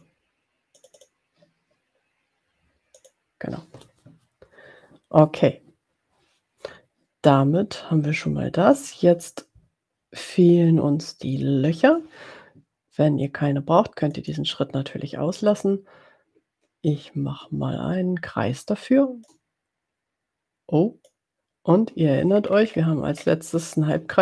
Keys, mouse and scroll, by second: 0.7 click, 2.9 click, 14.1 click, 19.3-21.2 ctrl+drag, 22.4-23.2 ctrl+scroll up 2, 23.3 ctrl+scroll up 2.